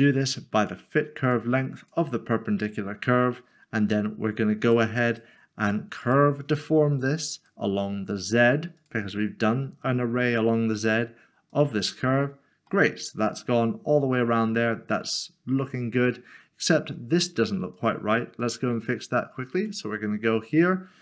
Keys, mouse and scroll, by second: 0.8 click, 4.7 click, 5.1 double click, 6.0 click, 12.7 middle click, 17.8 click.